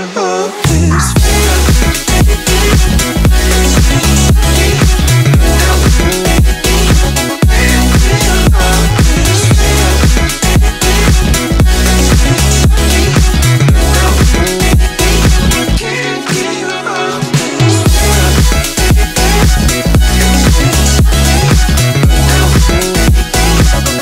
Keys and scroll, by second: 21.2 r, 23.7 r.